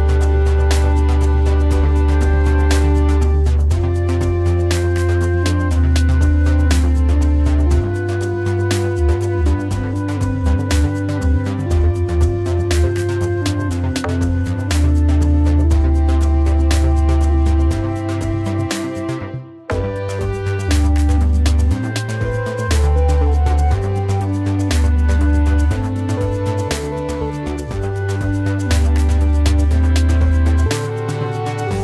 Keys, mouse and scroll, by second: 25.3 Delete, 28.6 Delete.